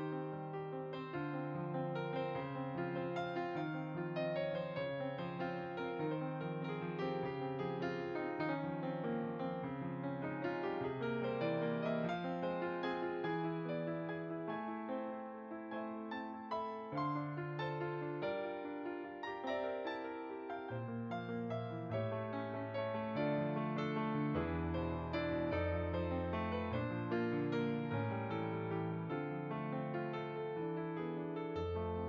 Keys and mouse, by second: 7.0 shift+click, 8.2 click, 10.9 click, 12.9 g, 13.1 f, 13.3 click, 24.3 f, 24.4 click.